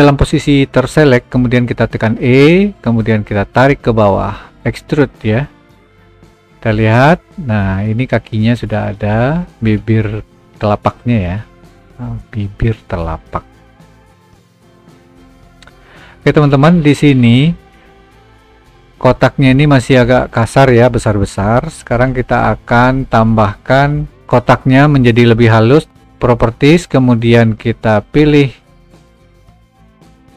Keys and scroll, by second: 1.7 e.